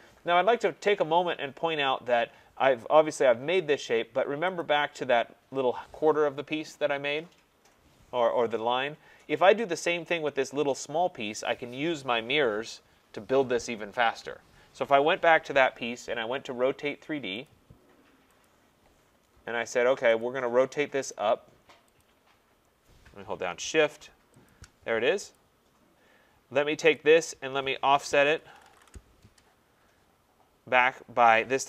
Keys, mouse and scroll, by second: 0.2 middle click, 0.2 middle click, 0.3 middle click, 1.8 middle click, 4.6 click, 17.4 click, 18.4 click, 20.2 click, 21.1 click, 22.0 click, 24.5 shift+click, 25.3 click, 26.9 click, 28.1-30.1 typing, 28.8 Return, 31.4-31.6 typing.